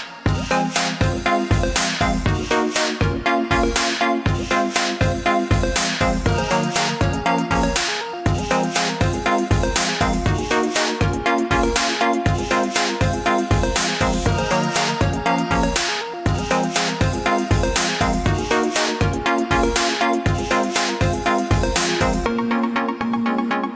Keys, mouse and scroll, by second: 0.0 click, 2.6 click, 9.0 click, 15.3 click, 17.8 click.